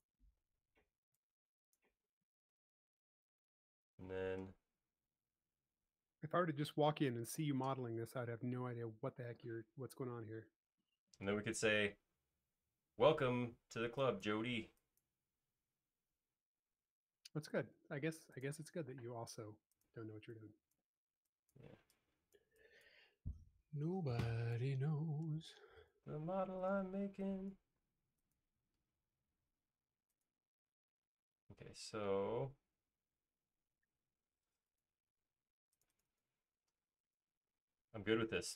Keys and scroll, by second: 0.6-1.3 typing, 2.9 space, 6.3 l, 13.7 e, 18.0 l, 19.9-20.6 typing, 25.1 typing, 26.9-27.8 typing, 30.7 space, 31.1 l, 34.0 space, 36.8 m.